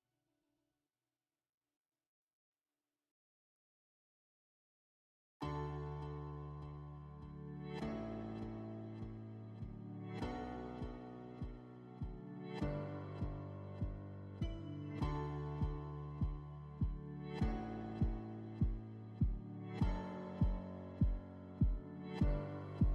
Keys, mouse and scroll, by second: 0.6 click, 1.2-3.4 typing, 2.6 Tab, 3.7 Return, 5.5-6.2 typing, 9.5 shift+click, 10.7 click, 12.6 click, 13.8 click, 15.5 middle click, 19.2 click, 20.3 click, 20.4 click, 21.3-22.9 typing, 22.0 Tab.